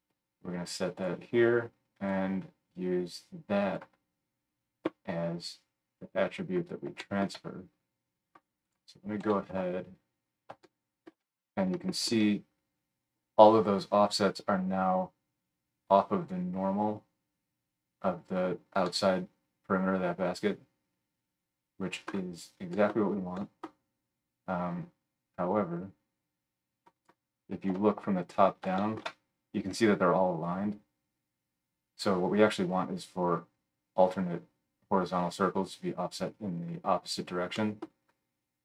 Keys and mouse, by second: 8.7-26.9 middle drag, 9.2 KP_1, 26.9 click, 27.0-38.6 middle drag, 27.7 KP_7.